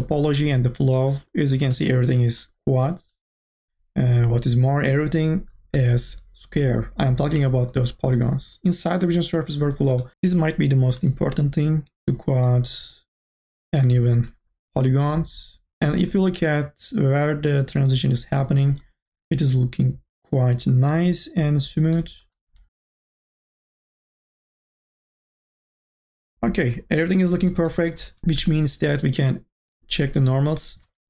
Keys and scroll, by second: 29.6 3.